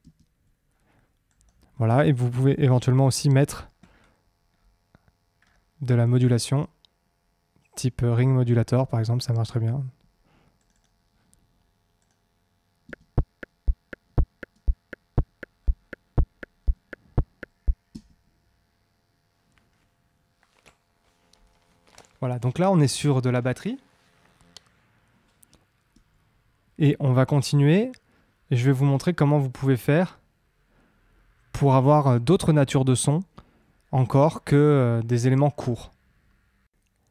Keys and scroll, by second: 12.8 space, 17.8 space.